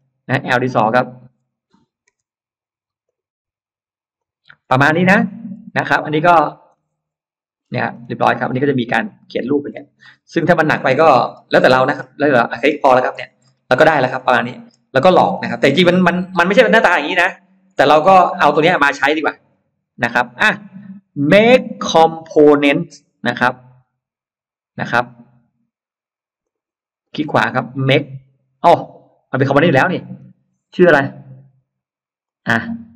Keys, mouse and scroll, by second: 0.3 scroll up 1, 0.8-1.1 scroll down 1, 2.9 click, 4.0 click, 4.6-4.9 scroll down 1, 4.6 space, 4.9 middle click, 5.3 space, 5.5 scroll down 1, 5.7 click, 5.9 click, 6.1 click, 6.6 middle click, 7.6 scroll down 2, 8.0-8.6 scroll up 4, 8.6 click, 9.0 click, 9.5-9.8 scroll down 1, 9.8 middle click, 11.1-11.4 scroll down 1, 11.4 middle click, 11.8-12.2 scroll down 1, 12.4-12.8 scroll down 1, 12.9 Escape, 13.3 middle click, 13.6 scroll down 1, 14.1 middle click, 15.5 scroll up 1, 16.0-16.4 scroll down 1, 16.6 e, 16.6 click, 17.6-17.9 scroll down 1, 17.8 space, 18.1-18.9 scroll up 2, 19.0 click, 19.3-19.9 scroll up 1, 19.9 scroll up 1, 20.1 middle click, 21.1 right click, 23.2 click, 26.3 click, 26.9 right click, 29.8 click, 32.1 click.